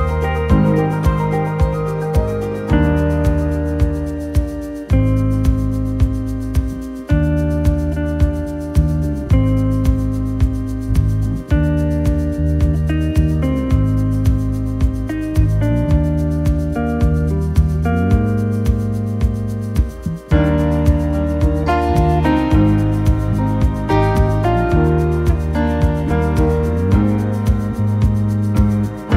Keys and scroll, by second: 1.6 ctrl+shift+p, 4.4 t, 10.2-12.2 typing, 16.8 t, 20.8-22.1 typing, 26.4-27.9 typing.